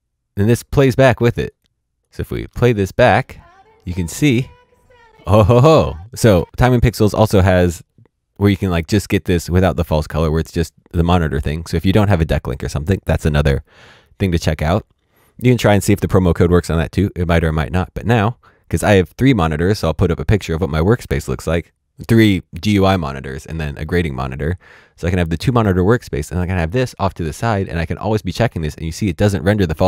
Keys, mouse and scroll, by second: 1.7 space, 2.0 click, 2.4 space, 6.2 space, 16.5 click, 26.3 click.